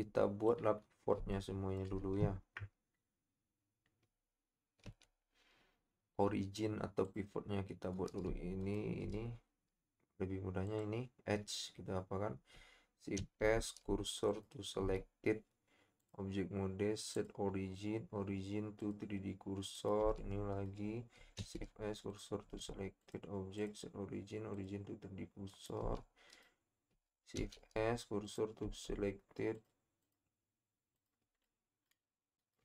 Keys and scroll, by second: 13.2 shift+s, 14.8 Tab, 20.2 Tab, 21.4 shift+s, 22.4 Tab, 27.4 shift+s, 28.6 Tab.